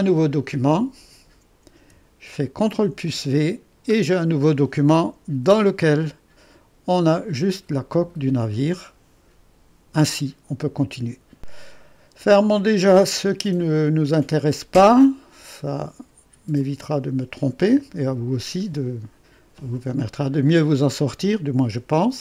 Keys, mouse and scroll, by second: 0.0-2.7 drag, 2.7 ctrl+v, 5.3 3, 11.4-19.8 drag.